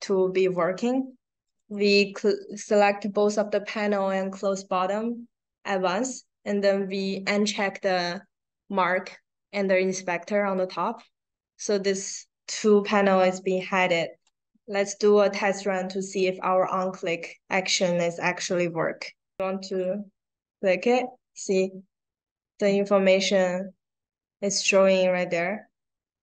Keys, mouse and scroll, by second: 1.4 shift+click, 10.3 click, 13.4 click, 19.6 click.